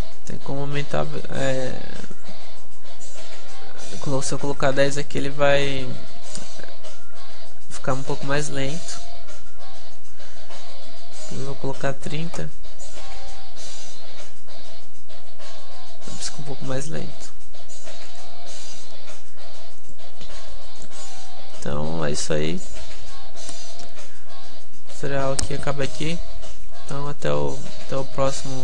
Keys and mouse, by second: 21.5 click, 21.7-23.7 middle drag.